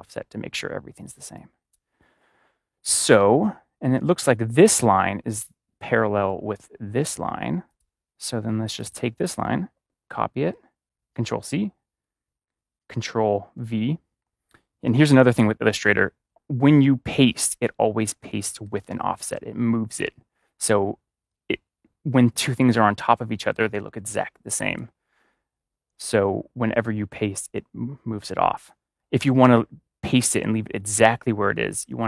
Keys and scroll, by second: 1.1 space, 10.0 ctrl+c, 13.5 ctrl+v, 29.1 BackSpace.